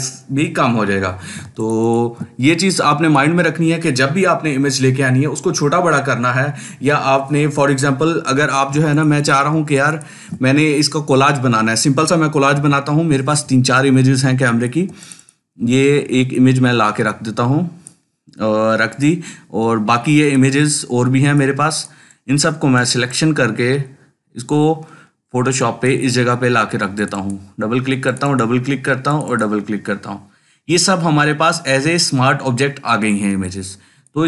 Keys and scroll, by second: 8.6 ctrl+space, 9.1 ctrl+space, 12.4 ctrl+t.